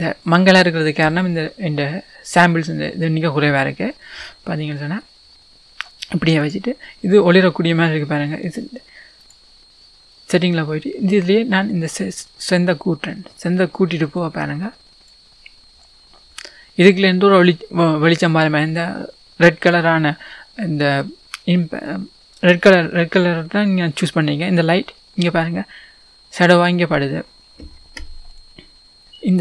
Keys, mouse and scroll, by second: 6.7 click, 7.0 middle click, 11.9-29.0 drag, 29.0-29.4 scroll down 2.